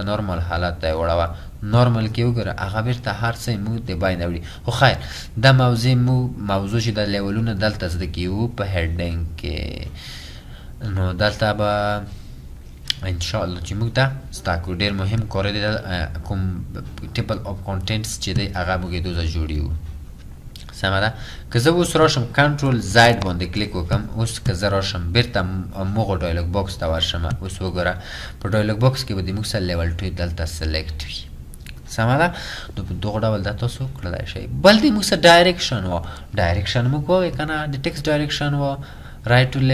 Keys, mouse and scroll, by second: 23.1 ctrl+ئ.